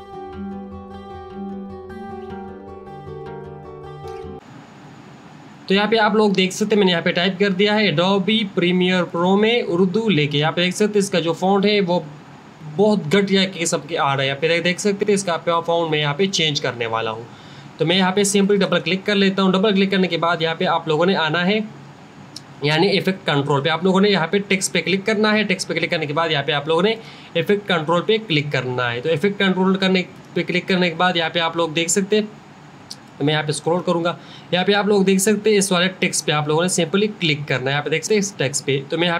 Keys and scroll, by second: 0.0-1.5 typing.